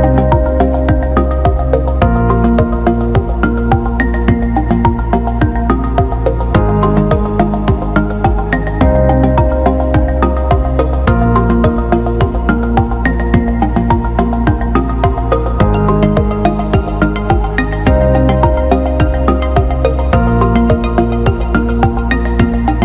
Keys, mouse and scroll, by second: 1.9 alt+shift+middle click, 4.2 alt+shift+middle drag, 5.2 alt+shift+drag, 7.1 shift+d, 8.2 alt+middle click, 8.8 s, 10.3-13.7 drag, 15.0-16.0 drag, 17.7 alt+shift+middle drag, 18.1 alt+middle drag, 18.6 alt+shift+middle click.